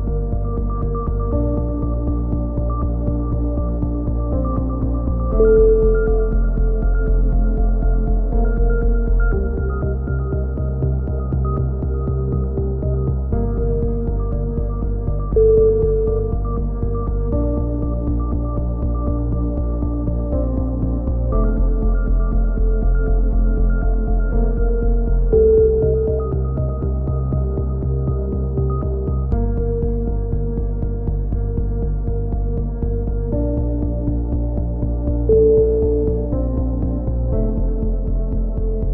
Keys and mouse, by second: 0.6 k, 3.0 click, 3.7 middle click, 4.0 click, 4.0 x, 4.9 a, 5.1-6.2 drag, 6.5 KP_3, 6.8 z, 7.2 z, 7.4 middle click, 7.8 z, 9.7 z, 10.1 click, 11.2 middle click, 11.6 KP_7, 12.0 z, 12.4-14.0 middle drag, 14.0 z, 14.3 z, 14.7 z, 15.2 click, 17.7 middle click, 18.0 middle click, 19.3 KP_7, 19.8 z, 20.2 z, 20.9 click, 21.6 KP_3, 22.0 click, 22.9 z, 23.8 z, 24.2 Tab, 25.1 z, 25.6 Tab, 27.2-28.3 middle drag, 29.9-31.7 drag, 33.4-34.7 drag, 35.2 a, 35.4 z, 35.8 click, 36.5-37.6 middle drag, 37.1 z, 37.6-38.9 drag.